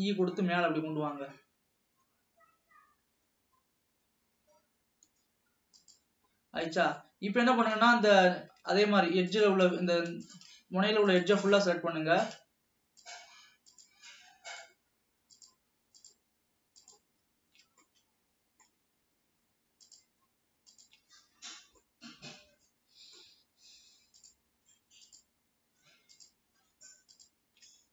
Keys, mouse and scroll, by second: 6.4 scroll up 1, 7.1-8.1 middle drag, 8.1 scroll up 1, 8.9 alt+a, 9.5 drag, 10.5 click, 11.5 shift+click, 13.2 shift+click, 13.8 shift+click, 14.8 shift+click, 15.6 shift+click, 16.2 shift+drag, 17.0 shift+click, 18.0-20.0 middle drag, 20.0 shift+click, 20.9 shift+click, 21.7 scroll down 1, 22.0-24.4 middle drag, 24.4 shift+click, 25.2 shift+click, 26.5 shift+click, 27.3 shift+click.